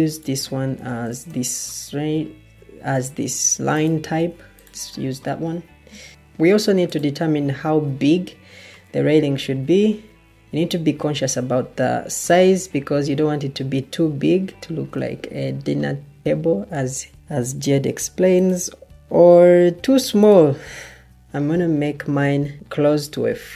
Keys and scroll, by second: 0.6 Escape, 22.0 Escape, 22.0 ctrl+z.